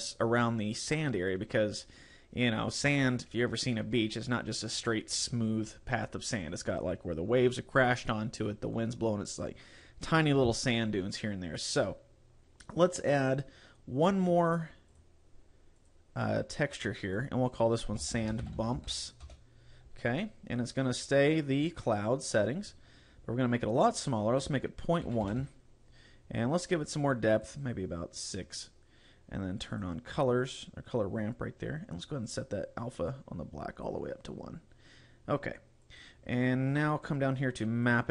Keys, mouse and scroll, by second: 11.8-13.5 scroll up 3, 14.1 click, 14.9 click, 15.8 click, 17.1 click, 22.0 scroll down 3, 24.1 click, 26.9 click, 27.1 click, 27.5 click, 27.7 click, 29.7 click, 30.5 click, 32.3 click, 35.9 click, 36.9 scroll down 3, 37.9 click.